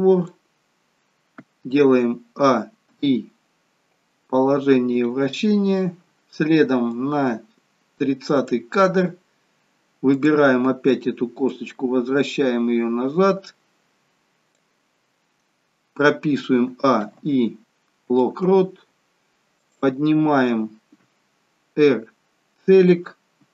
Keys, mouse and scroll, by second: 7.2 click, 10.3 click, 19.8 click, 21.8 r.